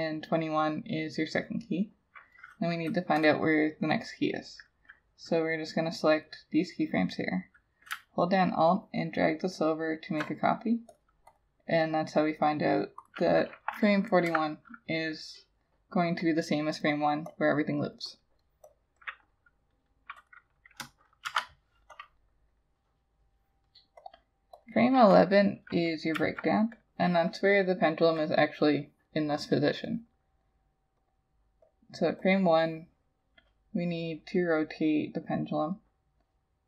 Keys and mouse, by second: 8.8 alt+click, 11.3 double click, 14.3 F6, 19.0 double click, 21.3 shift+F6, 26.2 F6.